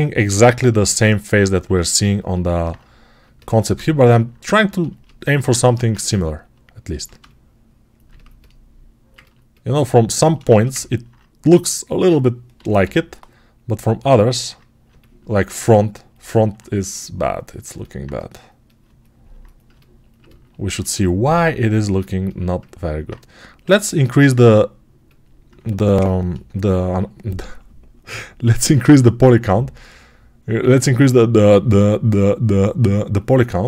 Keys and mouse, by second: 0.1-5.3 alt+drag, 5.3-13.9 right drag, 5.5 1, 12.5 h, 12.7 g, 22.9-33.6 right drag, 23.5 r, 26.1 ctrl+r.